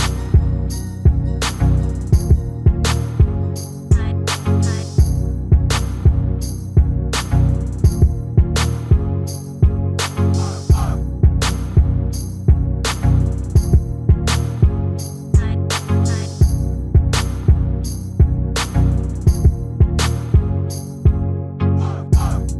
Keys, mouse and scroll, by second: 1.0 middle click, 1.7 Tab, 1.9 Tab, 2.1-4.1 middle drag, 4.1 right click, 4.7 click, 5.2 click, 6.0 right click, 6.9 click, 7.1 right click, 7.2 click, 7.7 shift+s, 9.7 click, 12.0 right click, 13.3 shift+s, 14.7-16.4 right drag, 17.9 middle click, 20.5 click.